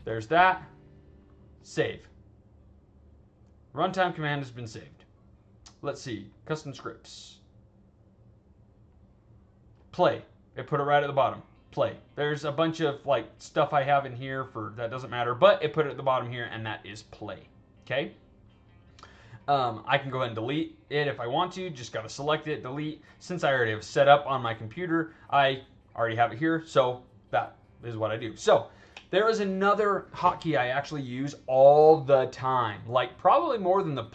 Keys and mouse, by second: 1.5 click, 3.7 click, 6.2 click, 7.2 click, 8.8-9.7 drag, 12.3-12.9 drag, 14.1-15.3 drag, 17.2-18.7 drag, 22.4 click, 24.2-25.4 drag, 33.6 click.